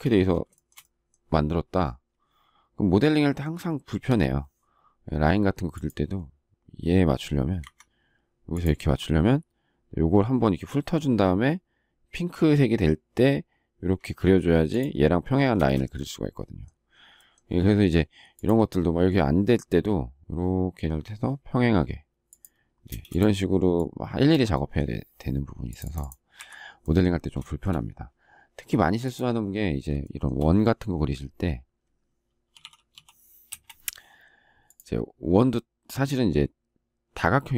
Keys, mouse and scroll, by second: 0.1 space, 0.6 shift+middle click, 7.6 Escape, 15.5 space, 22.8 space, 26.3 Delete, 27.4 shift+middle click, 30.0 shift+middle click, 33.5 Return.